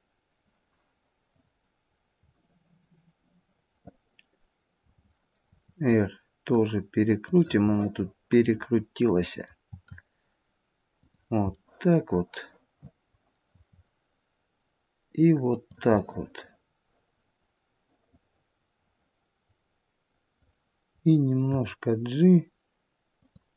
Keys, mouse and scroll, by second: 1.4 click, 1.9-2.4 scroll down 1, 2.4 middle click, 7.8 middle click, 7.8 r, 9.7 r, 11.6 middle click, 13.5 r, 16.0 middle click, 21.4 g.